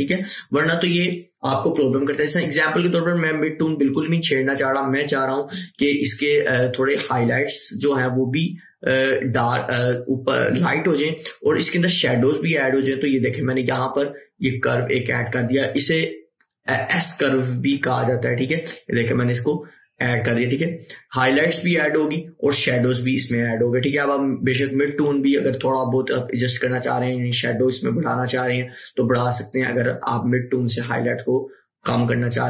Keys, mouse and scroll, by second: 18.0-22.8 drag, 25.0-32.4 drag.